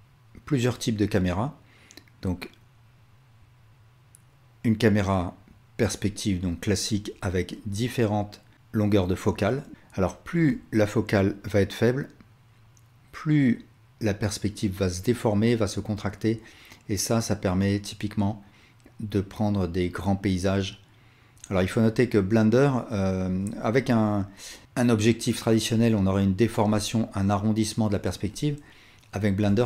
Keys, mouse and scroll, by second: 10.5-29.6 shift+drag.